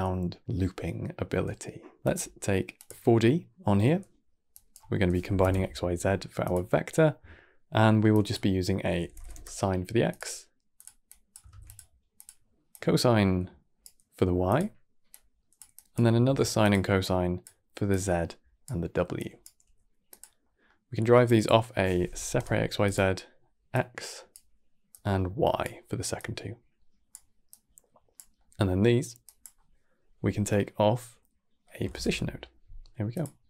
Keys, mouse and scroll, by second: 1.9-3.6 drag, 3.6 middle click, 4.4 click, 7.1 middle click, 8.0 click, 10.6 click, 10.9 click, 11.4 shift+d, 12.0 click, 12.6-14.4 drag, 15.0 click, 15.6 click, 16.1 shift+d, 16.9 click, 17.8 click, 19.0 click, 19.5 g, 20.3 middle click, 21.1 click, 23.6 click, 24.8 click, 26.0 click, 27.4 click, 28.2 middle click, 29.1 click, 33.4 scroll down 3.